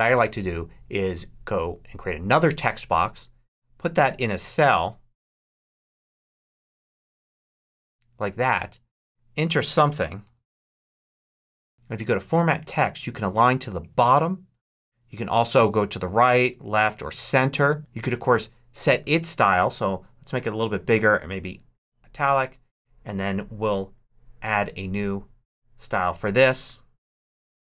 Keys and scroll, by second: 9.5-11.9 typing, 18.9 super+a, 26.7-27.6 typing.